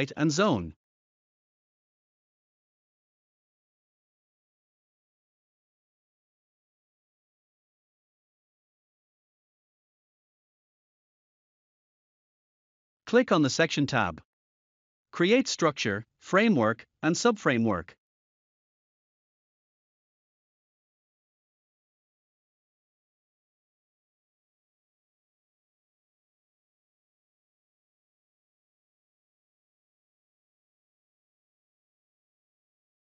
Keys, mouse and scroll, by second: 0.0 click, 1.9 click, 4.5 click, 6.1 typing, 7.6-8.4 typing, 10.0 click, 11.6 click, 13.2 click, 14.2 z, 15.7 typing, 18.0-18.7 typing, 19.2 click, 23.8 click, 27.1 click, 30.0 s, 32.8 typing.